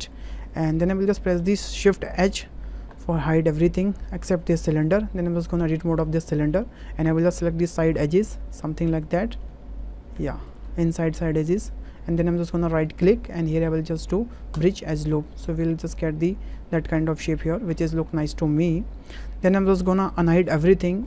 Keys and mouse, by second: 0.8 Tab, 2.2 shift+h, 4.9 Tab, 5.9 shift+click, 6.2 click, 7.0 2, 8.0 alt+shift+click, 9.7 ctrl+z, 10.8 middle click, 12.8-14.6 right drag, 15.1 middle click, 15.4 click, 15.8 middle click, 16.9 middle click, 17.7 Tab, 18.2 middle click, 20.4 alt+h.